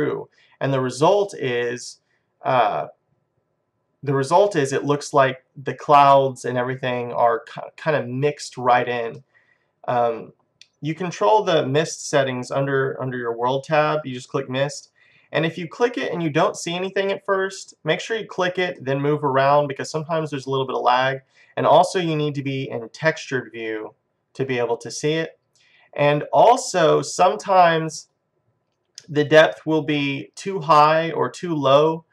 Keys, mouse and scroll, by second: 0.0-2.0 middle drag, 9.2-11.0 middle drag, 12.0-15.7 middle drag, 14.8-16.6 drag, 15.8 middle click, 18.8-20.7 middle drag, 23.7-25.5 drag, 28.2-30.4 drag.